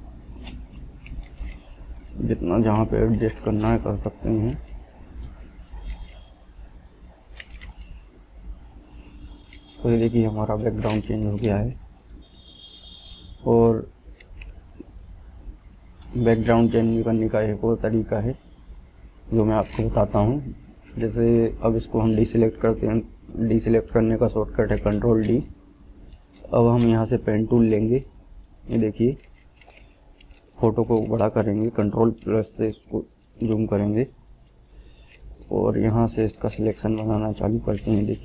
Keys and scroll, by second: 23.8 ctrl+d, 32.0 ctrl+=, 32.8 ctrl+=.